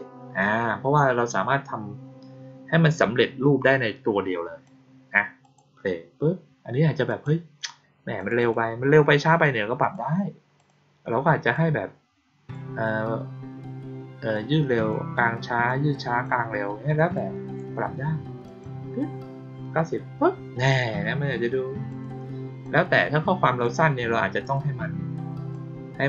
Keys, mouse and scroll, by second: 0.9-4.6 drag, 5.3 click, 7.0 click, 8.1 click, 8.3 click, 9.7 click, 10.5 click, 11.4-12.4 drag, 14.3 click, 15.6 click, 17.1-17.5 drag, 18.4 click, 20.5 click, 21.8 click, 22.5-23.5 drag, 24.3 click, 25.4 click.